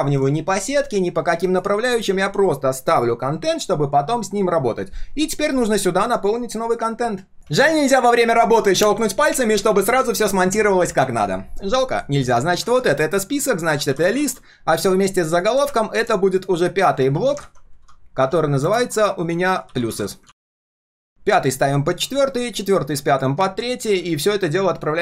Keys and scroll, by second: 12.5 ctrl+g, 12.8 ctrl+r, 17.1 ctrl+g, 17.4 ctrl+r, 20.2 ctrl+s, 20.8 alt+l, 21.4 ctrl+[, 22.3 ctrl+[, 24.1 ctrl+[, 24.4 ctrl+[.